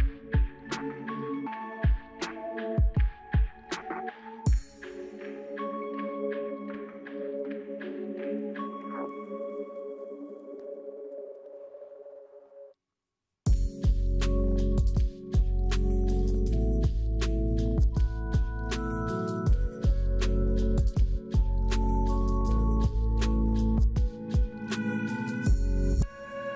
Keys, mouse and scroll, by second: 2.6-3.5 scroll up 8, 3.6 scroll down 2, 3.8 middle click, 4.0-5.6 scroll up 1, 7.1 middle click, 7.1 double click, 8.8 double click, 9.0 middle click, 11.2 double click, 12.4 middle click, 12.5 middle click, 12.9 scroll up 3, 14.4-19.7 scroll up 1.